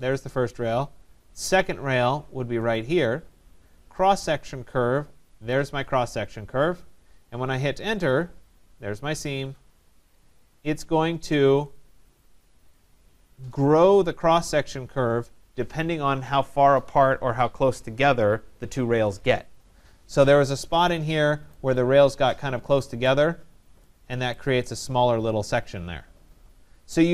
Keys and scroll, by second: 7.6 Return.